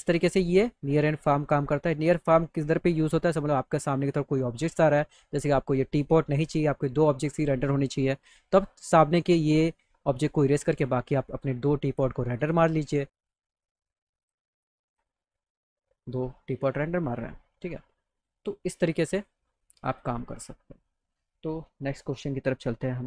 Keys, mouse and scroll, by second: 0.1-2.3 drag, 9.4 click, 12.4 click, 14.2 click, 14.9 click, 18.1 click, 19.1 click, 19.7 click, 20.2 click.